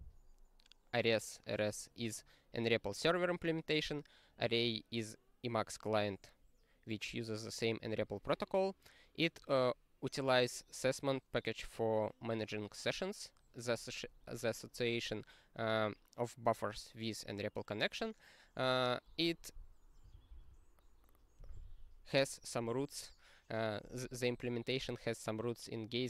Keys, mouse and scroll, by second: 19.6 click, 19.7 click, 20.1 ctrl+a, 20.3 ctrl+space, 21.3 ctrl+g.